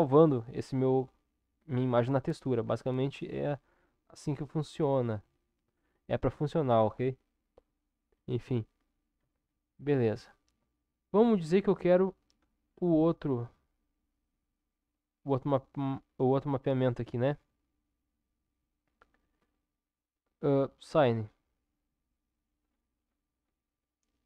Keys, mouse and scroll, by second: 4.8 ctrl+s, 9.2 Tab, 10.6 Tab, 14.5 click, 21.2 click.